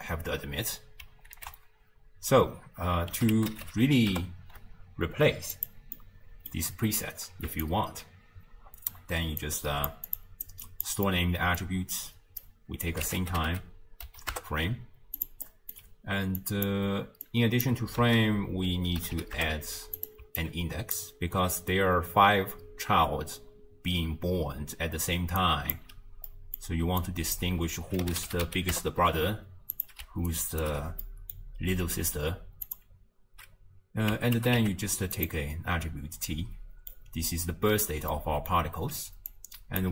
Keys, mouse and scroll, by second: 1.4 ctrl+a, 6.0-7.6 middle drag, 7.6 alt+click, 9.4 click, 10.5 click, 11.1-12.4 middle drag, 12.4 click, 15.5-16.4 middle drag, 16.4 click, 17.2 click, 19.2 d, 20.4 alt+click, 25.1 d, 25.4 click, 25.7 d, 25.9 d, 26.3-27.0 middle drag, 27.0 drag, 30.3 right click, 30.6 d, 31.0 d, 31.0 middle click, 31.6 scroll down 2, 32.7-35.7 drag, 36.3-38.5 middle drag, 38.5-39.0 scroll up 1, 39.3 click.